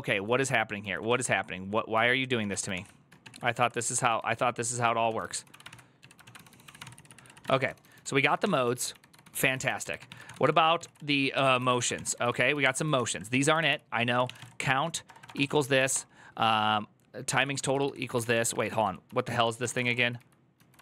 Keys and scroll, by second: 0.0-16.2 typing, 2.5 ctrl+c, 7.0 ctrl+c, 17.1 shift+Tab, 17.4 ctrl+c, 17.6 ctrl+c, 17.7-20.8 typing, 20.3 ctrl+j.